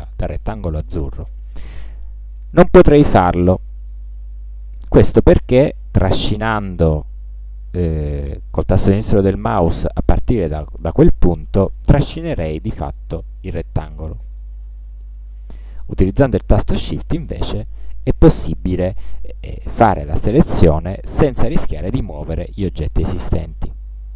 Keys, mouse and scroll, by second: 6.1-14.8 drag, 15.5 click, 17.3-18.5 shift+drag.